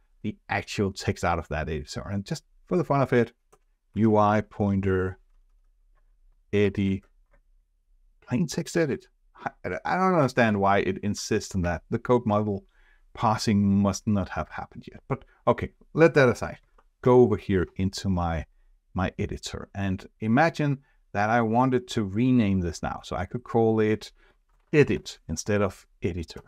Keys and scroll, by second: 6.9 ctrl+space, 17.0 shift+F4.